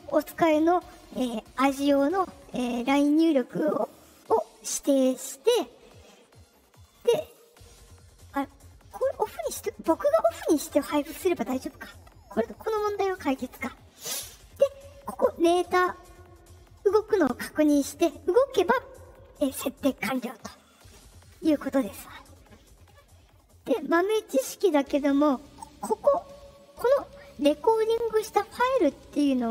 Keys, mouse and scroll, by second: 4.6 click, 6.9 click, 10.4 click, 27.3-29.5 drag.